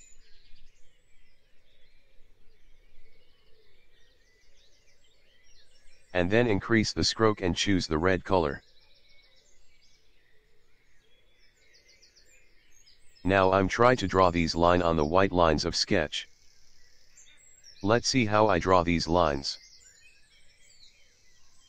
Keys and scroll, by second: 2.1 v, 3.5 /, 10.3 p, 20.6 v.